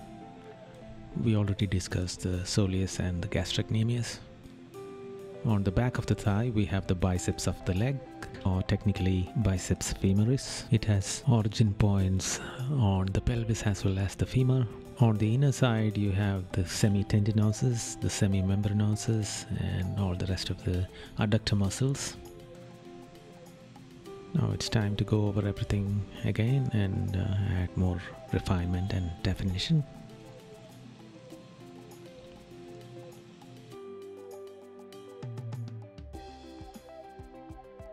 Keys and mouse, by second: 1.5 right click, 2.3 right click, 3.0 right click, 5.1 right click, 6.2 right click, 9.9 right click, 11.3 right click, 17.3 right click, 17.9 right click, 18.4 right click, 20.1 right click, 20.7 right click, 21.8 right click, 23.0 right click, 24.0 right click, 25.2 right click, 27.8 right click, 28.8 right click, 31.8 right click, 32.8 right click, 33.5 right click, 34.0 right click, 34.5 right click, 36.3 right click, 36.8 right click, 37.6 right click.